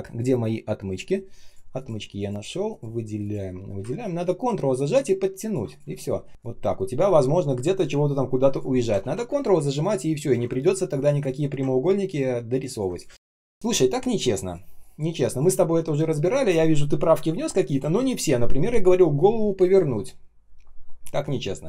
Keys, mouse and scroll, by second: 1.0 ctrl+alt+shift+l, 3.1 shift+Return, 4.1 ctrl+click, 5.8 space, 6.3 shift+Return, 9.0 ctrl+z, 9.8 ctrl+click, 11.2 shift+Return, 12.0 ctrl+click, 13.0 space, 13.5 space.